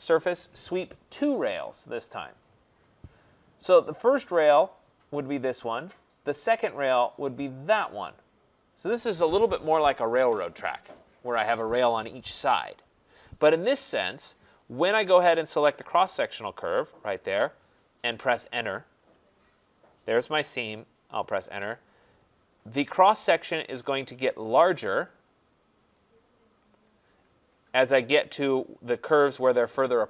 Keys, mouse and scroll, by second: 1.7 click, 5.4 click, 7.8 click, 16.2 click, 18.9 Return, 21.2 Return, 24.3 right click, 24.5 scroll, 26.8 click, 27.4 scroll, 28.8 middle click.